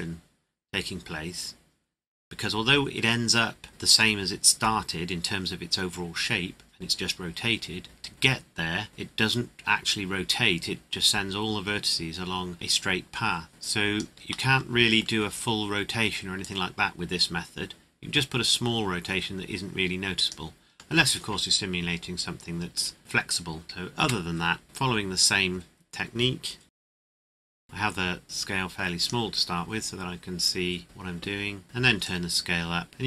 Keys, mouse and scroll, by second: 14.5 middle click, 16.4 click, 20.7 scroll down 1, 23.2 click, 23.6 KP_1, 24.0 KP_Enter, 26.6 |, 26.7 click, 27.3 click, 31.6 click.